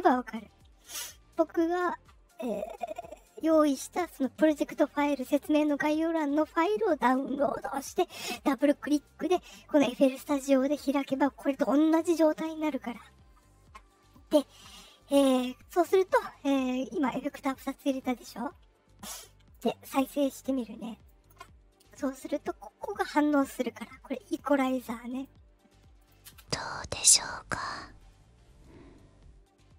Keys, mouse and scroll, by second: 2.6-4.1 drag, 18.1-19.5 drag, 20.5 click, 22.0 click, 25.1 click, 25.9 click, 26.2 space.